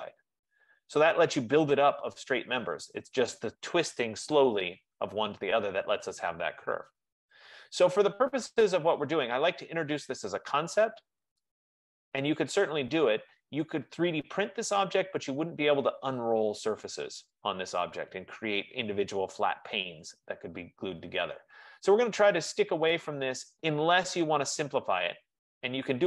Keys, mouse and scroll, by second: 7.4 middle click, 7.4 scroll up 1, 7.5 scroll, 8.6 right click, 9.1-9.5 scroll, 12.4 right click, 14.5-17.4 right drag, 21.0-25.9 middle drag.